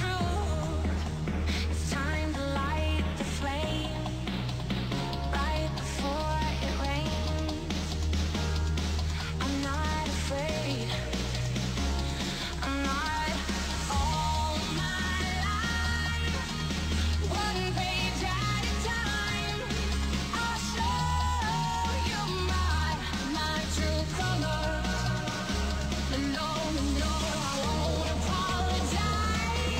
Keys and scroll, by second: 3.9 space, 6.6 space, 11.8 space, 21.8 space.